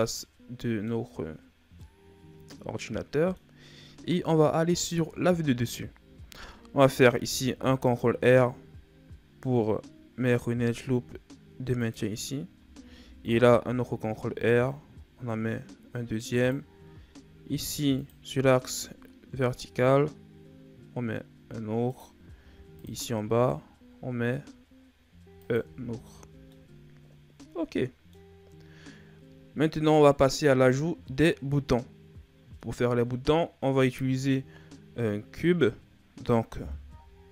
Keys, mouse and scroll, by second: 0.0 middle click, 0.9-1.5 scroll up 3, 1.5 scroll down 2, 1.7-4.7 middle drag, 5.0 KP_7, 7.3 ctrl+r, 12.7 ctrl+r, 17.3 ctrl+r, 22.3 ctrl+r, 25.6 Tab, 26.2 scroll down 2, 26.4-28.3 middle drag, 28.3-29.5 scroll up 2, 29.5-32.5 middle drag, 35.8-36.3 scroll down 1.